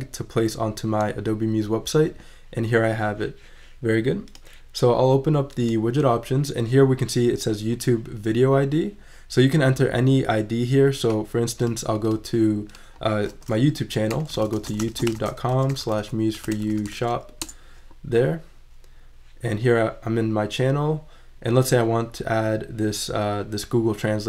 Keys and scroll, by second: 13.9-16.9 typing.